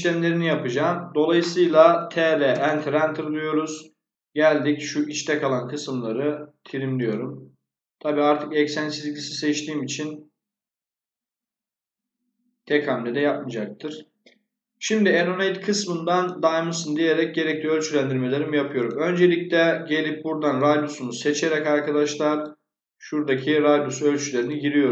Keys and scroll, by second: 1.6-2.5 typing, 12.5 Escape.